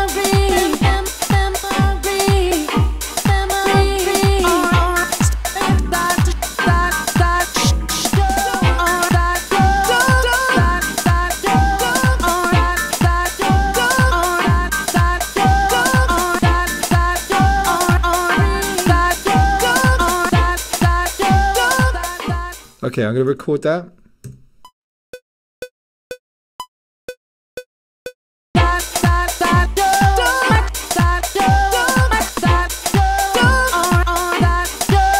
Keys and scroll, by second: 23.3 1, 24.3 *.